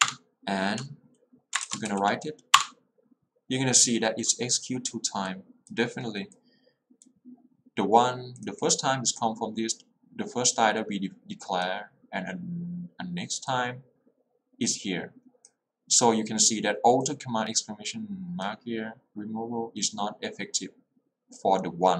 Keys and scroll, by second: 0.1 Return, 2.0 w, 2.7 Return.